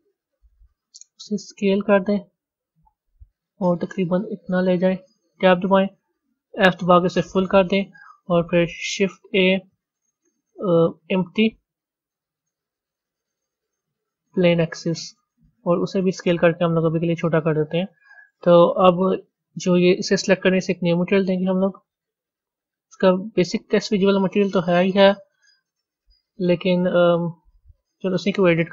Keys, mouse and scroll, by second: 0.9 s, 5.4 b, 7.6 Tab, 8.6 shift+a, 16.0 s, 19.4 click, 21.3-25.0 drag, 25.2 click, 26.2-28.7 drag.